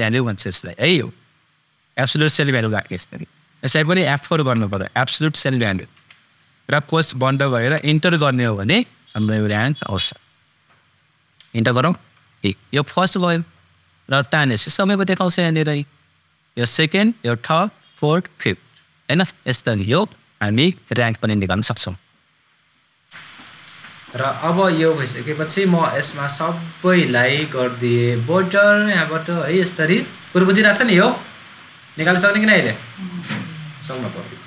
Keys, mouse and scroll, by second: 1.6 super+click, 4.5 super+F4, 5.9 super+Right, 5.9 typing, 7.5 shift+super+0, 9.7 typing, 13.4-16.7 super+drag, 25.3-28.5 super+drag.